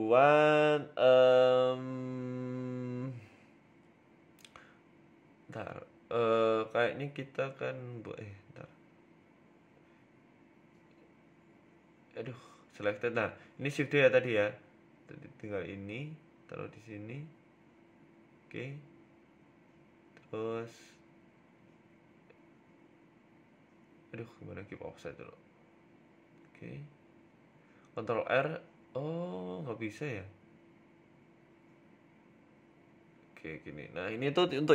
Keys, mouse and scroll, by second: 0.3-0.7 scroll up 9, 0.7 shift+middle click, 1.0 scroll down 4, 1.7-2.5 scroll down 3, 2.5 z, 3.3 middle click, 5.0 scroll down 3, 5.2 middle click, 5.5 scroll up 4, 5.7 shift+middle click, 6.4 right click, 6.9 KP_1, 7.7 KP_7, 8.0 Tab, 8.2 scroll up 3, 8.9-11.0 typing, 11.6 Tab, 12.7 Tab, 14.1 Tab, 14.1 p, 14.5 right click, 15.9 Tab, 16.4 Tab, 17.2 a, 17.4 g, 19.7 Tab, 20.1 shift+s, 21.3 Tab, 22.1 ctrl+z, 22.6 ctrl+z, 23.0 Tab, 23.8 Tab, 24.1 shift+s, 24.8 Tab, 25.3 shift+s, 26.9 s, 29.1 ctrl+r, 29.7 middle click, 30.3-30.7 scroll down 3, 30.7 KP_1, 31.3-31.7 scroll up 3, 31.6 s, 32.8 s.